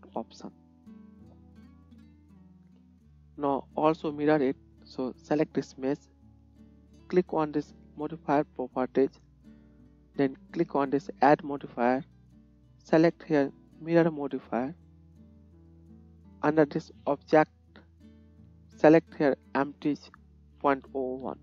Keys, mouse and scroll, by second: 0.5 middle click, 1.6-16.5 drag, 1.8 KP_1, 8.6 middle click, 8.6 right click, 10.5-16.5 middle drag, 10.5-16.5 right drag.